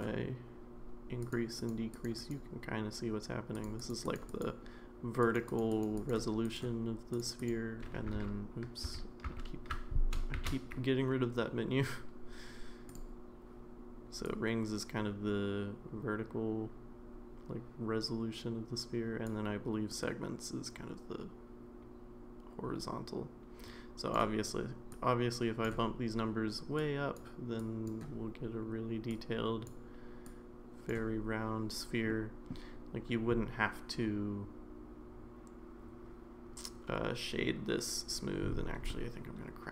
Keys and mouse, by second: 1.2 click, 1.6 click, 1.9 click, 2.2 click, 3.6 click, 3.8 click, 4.0 click, 4.3 click, 5.3 click, 5.5 click, 5.7 click, 6.0 click, 6.4 click, 7.4 click, 8.2 ctrl+z, 8.9 ctrl+z, 9.7 ctrl+z, 10.3 shift+a, 14.2-19.3 drag, 20.0-24.1 drag, 25.0 click, 26.8 click, 27.6 click, 29.3-39.7 drag.